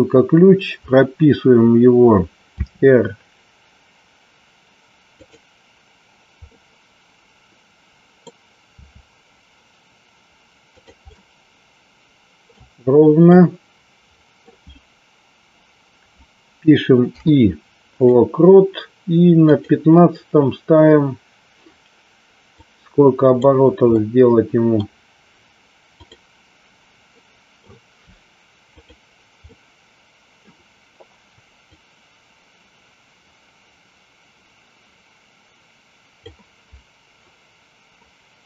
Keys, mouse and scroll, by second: 5.3 click, 6.6-8.5 middle drag, 11.2-12.6 middle drag, 12.6 scroll down 1, 13.5-14.6 middle drag, 19.6 click, 22.6-23.6 drag, 24.1 middle click, 26.2 click, 27.4 middle click, 28.9 click, 29.7-30.5 middle drag, 31.7-36.5 drag.